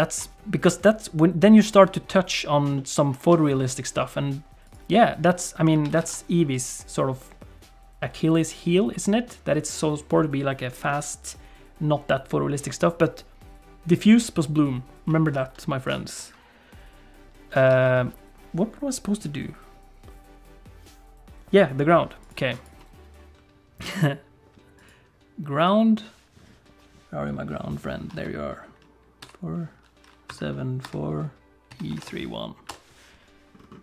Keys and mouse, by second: 2.9 shift+middle click, 5.7 alt+a, 6.0 ctrl+s, 6.6 click, 10.9-12.3 middle drag, 15.8 click, 17.7 alt+a.